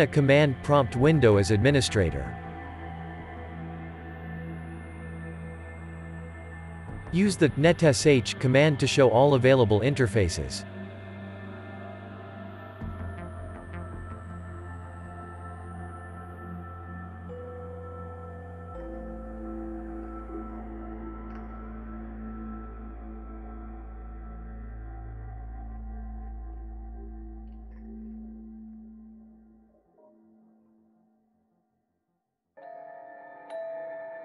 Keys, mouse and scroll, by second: 4.1 click, 6.1 click.